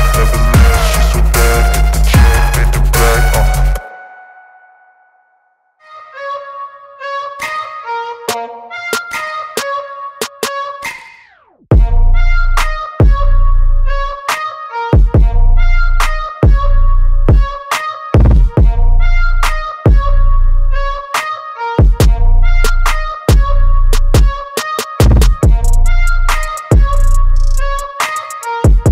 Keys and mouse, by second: 2.4 ctrl+z, 6.1 click, 8.3 click, 9.3 i, 9.8 shift+click, 10.0 v, 10.5 click, 11.8 space, 11.9 click, 12.1 space, 12.5 click, 14.7 right click, 15.2 click, 16.6 click, 17.8 click, 24.4 click.